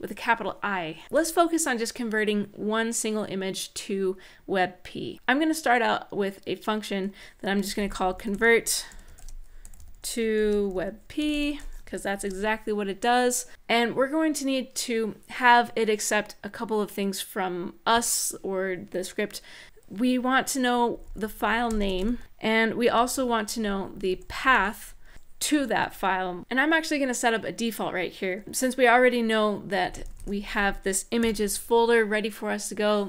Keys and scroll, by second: 0.0-0.1 typing, 7.1-11.9 typing, 20.4-25.3 typing, 26.3 shift+', 29.3-31.0 typing.